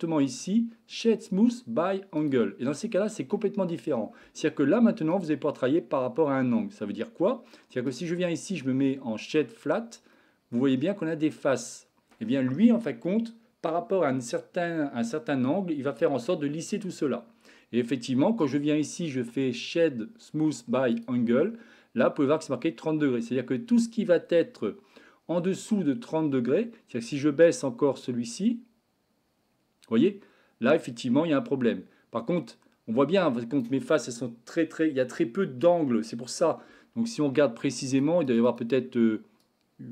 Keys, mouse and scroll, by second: 3.4-3.9 shift+middle drag, 5.2 click, 7.9-9.6 right drag, 10.2-10.6 middle drag, 18.3-23.1 right drag, 27.0-33.7 drag, 37.8 click, 38.2 click, 38.5 click, 39.5-39.9 drag.